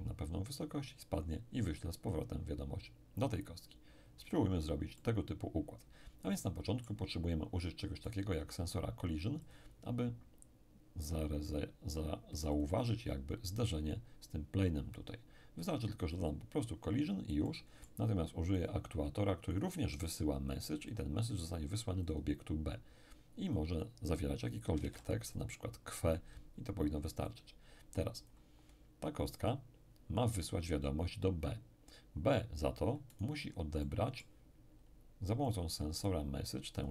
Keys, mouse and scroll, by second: 5.0-7.8 middle drag, 8.1 right click, 9.4 click, 12.6 click, 17.4-20.6 middle drag, 18.6-20.6 drag, 20.9 click, 22.1 click, 23.5 click, 24.8 q, 24.8 w, 25.4 click, 25.4 e, 27.3-29.2 drag, 33.1 right click, 33.8 middle click, 34.8-35.5 scroll up 1, 35.5 click, 36.8-36.9 drag.